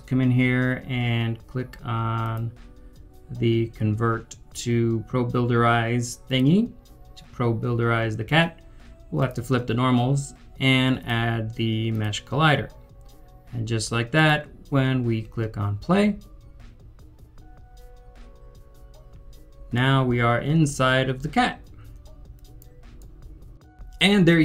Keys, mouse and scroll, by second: 19.7 double click, 19.7 right click, 20.1-23.2 typing, 23.0 right click.